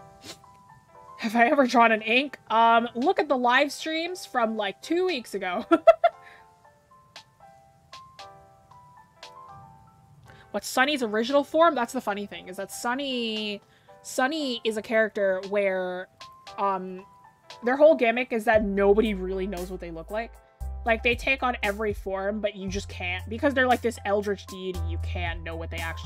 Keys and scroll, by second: 5.2 ctrl+z, 12.2 scroll down 1, 16.5 scroll up 1.